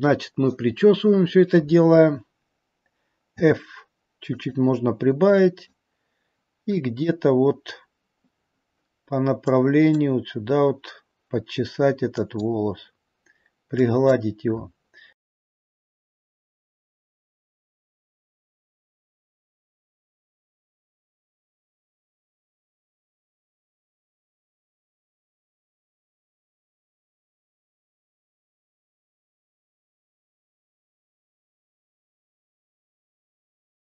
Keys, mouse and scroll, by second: 3.3 f, 5.5 click, 6.9 click, 9.7 click, 12.4 click, 13.9 click, 14.9 scroll up 2, 15.2 middle click, 15.7 click, 15.9 click, 16.2 click, 16.5 click, 17.0 click, 17.2 click, 17.6 click, 17.9 click, 18.2 click, 18.5 click, 18.8 click, 19.1 click, 19.4 click, 19.6 scroll down 1, 19.6 middle click, 20.3 click, 20.6 click, 20.9 click, 21.1 click, 21.4 click, 21.6 click, 21.9 click, 22.2 click, 22.5 click, 22.8 click, 23.1 click, 23.4 click, 23.6 middle click, 23.8 middle click, 24.3 click, 24.5 middle click, 25.1 click, 25.4 click, 25.7 click, 26.2 click, 26.4 click, 26.7 click, 27.0 click, 27.3 click, 27.5 click, 27.9 click, 28.2 click, 28.6 click, 28.9 click, 29.2 click, 29.4 click, 29.8 click, 30.2 click, 30.6 click, 30.9 click, 31.3 click, 31.5 click, 31.8 click, 32.0-32.5 scroll down 4, 32.2 scroll up 1, 32.5 click, 32.8 click, 33.1 click, 33.4 click, 33.7 click.